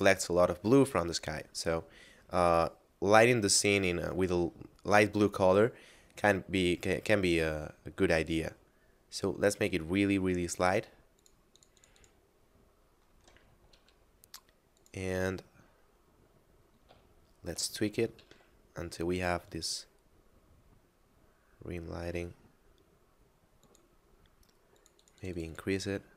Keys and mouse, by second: 6.5 click, 11.2 click, 13.7 r, 14.8 click, 17.2 shift+middle click, 17.8 r, 18.2 z, 23.6 click.